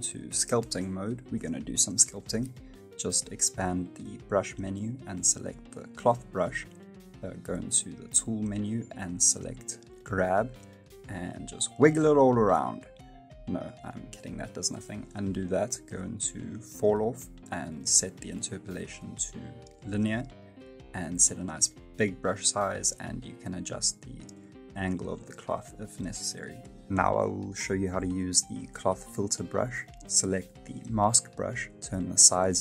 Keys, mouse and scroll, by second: 0.5 click, 10.4 click, 11.2 click, 14.3 ctrl+z, 14.7 middle click, 19.3 click, 20.1 middle click, 21.4 f, 22.7 f, 23.4 click, 25.1 middle click, 26.8 middle click, 29.9 scroll up 1, 30.1 click, 31.1 f.